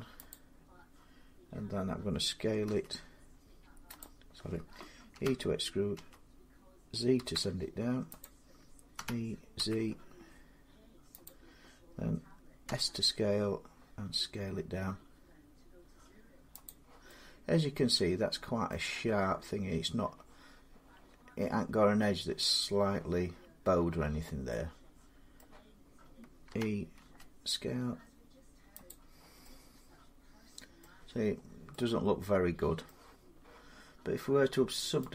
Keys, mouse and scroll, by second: 2.4 s, 3.8-7.4 drag, 4.9-5.7 typing, 6.9 z, 8.0 click, 8.8-9.8 typing, 11.0 click, 12.4 s, 14.5-16.1 drag, 16.4-18.4 drag, 18.4-23.5 middle drag, 25.2-27.9 middle drag, 26.2-26.8 typing, 28.7 click, 30.6 middle click, 31.1 scroll, 31.2-31.5 scroll down 3, 31.2 typing, 32.6 middle click, 34.9 click.